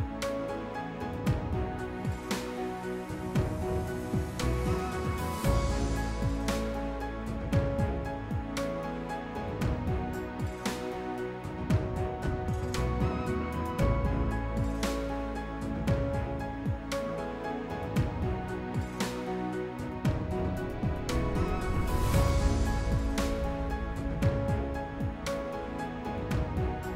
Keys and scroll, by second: 18.9-19.8 typing.